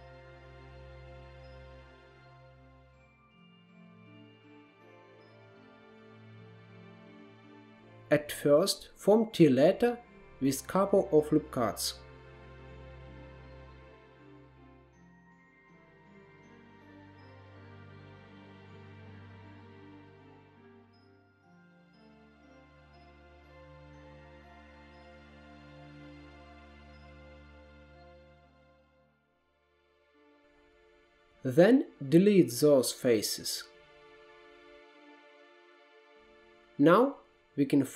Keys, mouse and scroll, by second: 0.4-1.7 middle drag, 1.7 scroll up 3, 2.0-3.4 middle drag, 3.4 scroll up 1, 3.6-3.9 middle drag, 3.9 scroll down 1, 4.2-5.4 shift+middle drag, 5.4 click, 5.9-6.3 scroll down 1, 6.3-7.4 shift+middle drag, 7.4 Tab, 8.2 ctrl+r, 9.0 ctrl+r, 10.2-11.2 middle drag, 11.2 ctrl+z, 12.4 middle click, 13.3 ctrl+r, 13.9 ctrl+r, 14.7 ctrl+z, 14.9 middle click, 15.7 ctrl+r, 16.3 ctrl+r, 19.1 ctrl+r, 22.9 alt+z, 23.4 1, 23.6 click, 23.9 click, 24.5 shift+click, 24.9 x, 25.4 x, 25.6 middle click, 26.4 2, 26.6 click, 27.3 f, 27.5 f, 27.7 middle click, 28.4 click, 28.9 f, 29.1 f, 29.3 middle click, 30.0 KP_1, 30.9 3, 31.1 click, 31.6 shift+click, 32.5 shift+click, 32.9 shift+click, 33.1 shift+click, 33.3 shift+click, 33.7 x, 34.2 x, 34.4-36.4 middle drag, 36.4 2, 36.9 click, 37.4-37.9 middle drag.